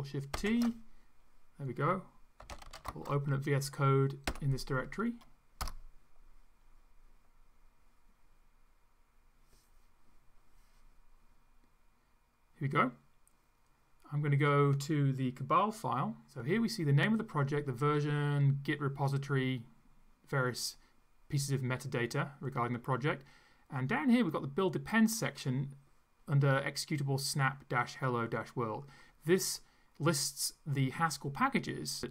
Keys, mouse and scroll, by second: 0.3 ctrl+shift+t, 2.2-4.2 typing, 5.6 Return, 24.3-25.6 drag.